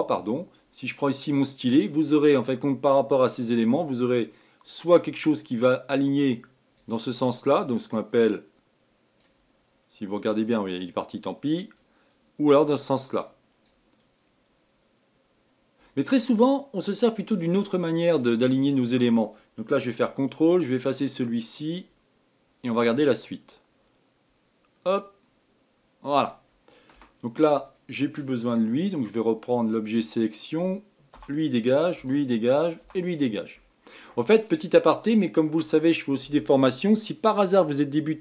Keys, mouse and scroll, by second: 1.1-17.0 drag, 18.2-20.3 middle drag, 20.3-23.4 ctrl+drag, 26.9 space, 29.4-30.2 drag, 31.1 Delete, 31.6 click, 31.9 Delete, 32.4 click, 32.8 Delete, 33.6-36.6 middle drag.